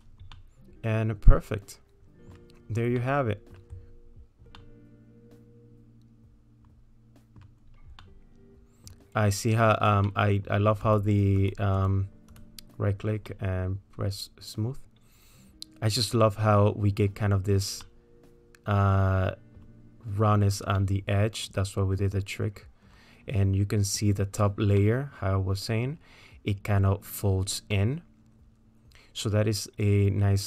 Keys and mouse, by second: 0.3-2.4 middle drag, 3.0 middle click, 4.6-7.6 middle drag, 8.1 middle click, 10.2 middle click, 10.9 click, 11.4 click, 11.8 click, 13.3-17.1 middle drag, 17.8-19.7 middle drag, 20.8-24.1 middle drag, 24.8-26.0 middle drag, 27.8-30.4 middle drag.